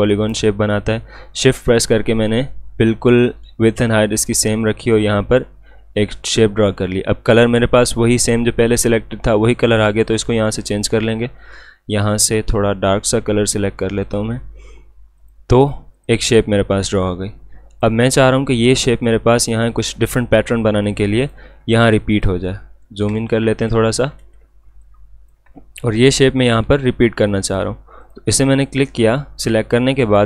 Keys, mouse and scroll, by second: 10.4-18.7 drag, 22.6-22.9 alt+scroll up 1, 23.2 space, 23.3 click, 24.0-24.6 alt+scroll down 2, 24.2 space, 24.7 space, 24.8 click, 25.2 space, 26.1 click.